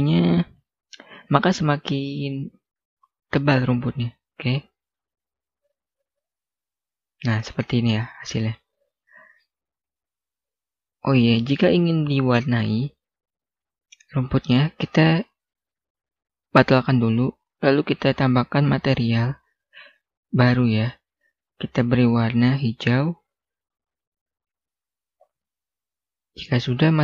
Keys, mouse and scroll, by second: 3.9 click, 5.5 1, 6.5 Return, 7.5 middle click, 15.9 click, 25.6-26.2 scroll down 1, 26.2 scroll up 1, 26.4-27.0 scroll down 1.